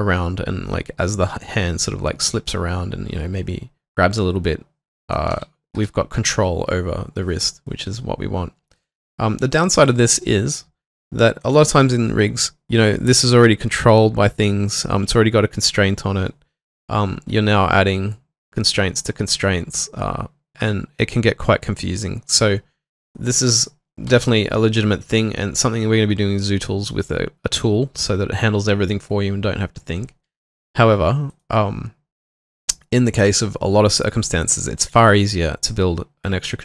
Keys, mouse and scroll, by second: 5.1-5.9 typing, 23.5 double click.